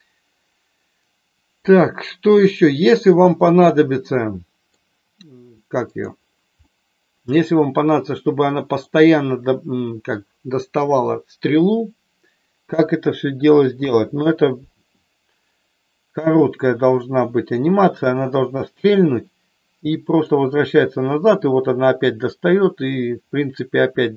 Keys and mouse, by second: 2.6 middle click, 3.7-4.8 middle drag, 5.8 click, 6.6 middle click, 8.4 middle click, 12.6 KP_1, 13.7 KP_3, 16.3-17.4 drag, 20.0 click, 20.8-24.1 drag.